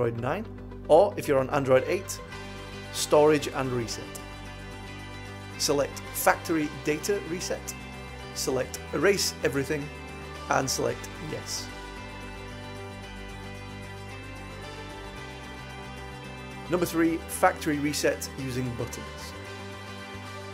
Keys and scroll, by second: 2.8 Return, 8.6 Down, 10.2 Return, 11.7 Down, 13.5 Return.